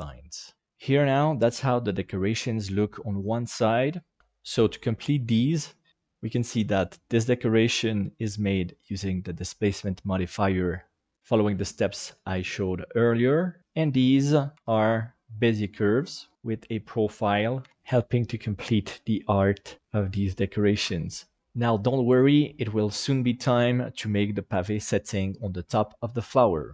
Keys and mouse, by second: 14.2 right click, 14.6 Tab, 16.3 KP_Divide, 16.7 middle click, 20.9 Tab, 21.4-22.3 middle drag, 23.3-23.7 middle drag, 23.9 shift+middle click.